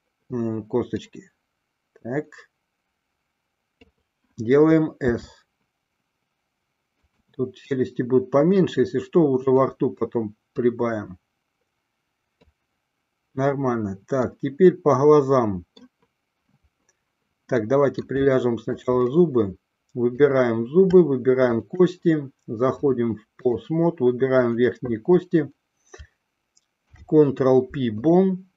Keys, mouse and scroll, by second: 1.1-4.0 drag, 5.3 s, 8.6-9.8 drag, 10.6-12.6 drag, 14.4-16.0 middle drag, 17.8-18.3 middle drag, 18.4-19.0 shift+middle drag, 20.3 click, 22.9-23.8 drag, 24.7 click, 26.9 ctrl+p.